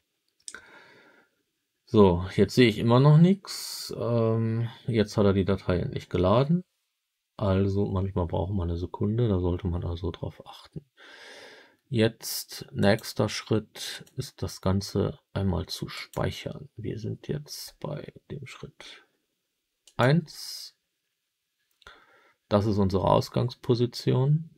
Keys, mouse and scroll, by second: 12.7-14.1 drag.